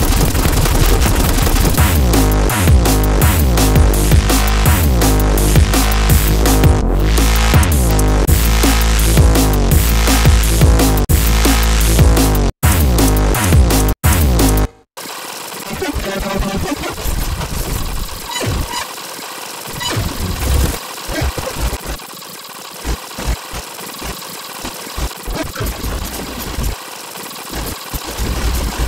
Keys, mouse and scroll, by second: 0.4 click, 0.6 click, 2.0 click, 3.8 click, 4.8 scroll down 1, 5.6-6.1 scroll up 1, 8.2 click, 11.0 click, 12.5 click, 13.8 click, 14.4-19.6 typing, 15.1 scroll down 2, 15.7 scroll up 2, 15.9 click, 16.8 scroll down 2, 17.1 click, 17.2 click, 17.3 click, 17.7 click, 17.8 scroll down 2, 18.7 middle click, 18.8 middle click, 18.9 scroll down 2, 19.1 middle click, 19.2 scroll up 2, 19.3 middle click, 19.5 ctrl+w, 19.6 click, 20.6 click, 20.7 click, 20.8 Delete, 20.9 scroll down 1, 21.0 click, 21.0-28.0 typing, 21.1 scroll up 1, 21.3 click, 22.0 click, 22.2 scroll down 1, 22.3 click, 22.6 click, 22.9 click, 23.4 alt+click, 23.5 ctrl+z, 23.7 alt+click, 24.0-24.4 scroll down 4, 24.2 click, 24.4 scroll up 1, 24.5 ctrl+click, 24.7 click, 25.0 scroll down 2, 25.6 scroll up 2, 26.5 click, 26.7 scroll down 4, 26.9 click, 27.1-27.6 scroll up 4, 27.3 click, 27.8 click, 28.7 alt+click, 28.8 click.